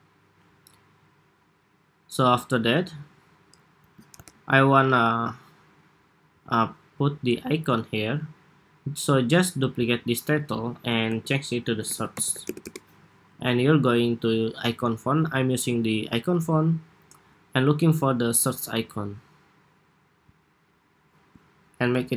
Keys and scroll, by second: 3.8 super+=, 10.2 super+d, 10.9 super+r.